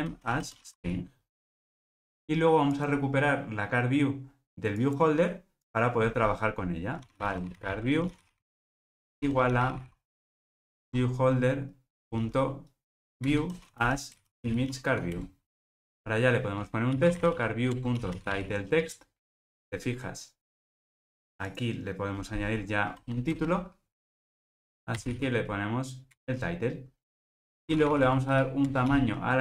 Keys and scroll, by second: 1.6 Return, 10.9 Return, 15.8 super+z, 18.1 Return, 26.2 Return.